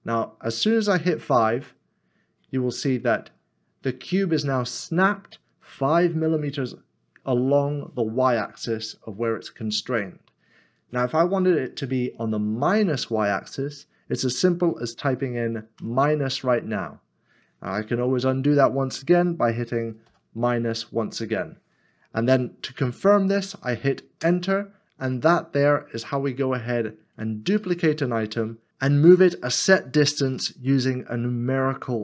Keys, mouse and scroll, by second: 1.6 5, 15.7 5, 20.0 -, 20.1 -, 24.2 -, 24.9 Return, 26.0 middle click, 26.7-27.4 scroll down 1, 27.7 shift+middle click.